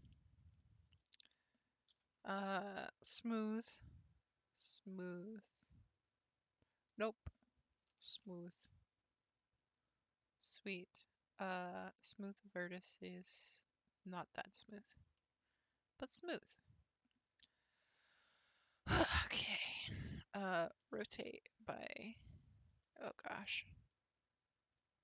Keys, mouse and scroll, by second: 1.2 a, 1.9 ctrl+v, 8.1 ctrl+v, 9.9-10.3 scroll down 2, 10.4 middle click, 11.2 scroll up 1, 11.9-15.2 drag, 15.2-17.6 middle drag, 17.6 click, 18.1-20.8 middle drag, 20.8 r, 23.1 g.